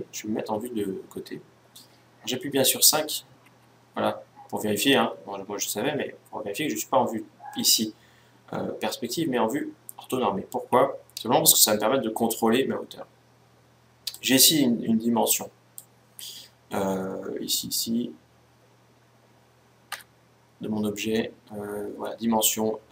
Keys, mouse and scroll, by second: 0.0 KP_1, 2.3 KP_5, 3.1 KP_5, 4.7 KP_5, 9.1 KP_5, 13.8-15.6 drag, 19.7 Tab.